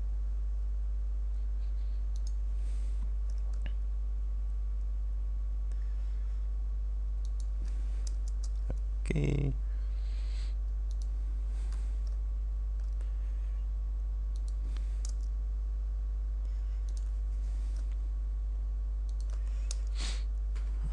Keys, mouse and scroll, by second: 2.3 click, 7.3 ctrl+click, 8.3 Return, 11.1 click, 14.4 click, 15.1 Return, 16.9 click, 19.1 ctrl+click, 19.8 ctrl+Return.